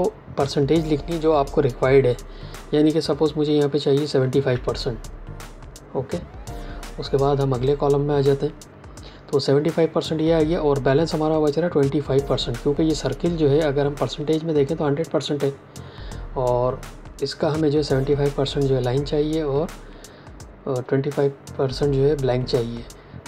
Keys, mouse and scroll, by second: 4.0 KP_7, 4.4 KP_5, 7.5 click.